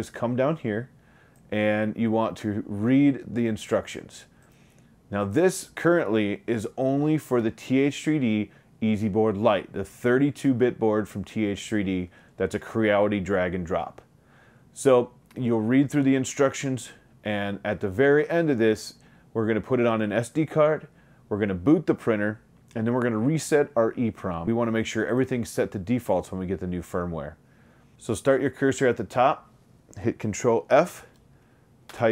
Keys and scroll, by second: 30.7 ctrl+f, 32.0 Return.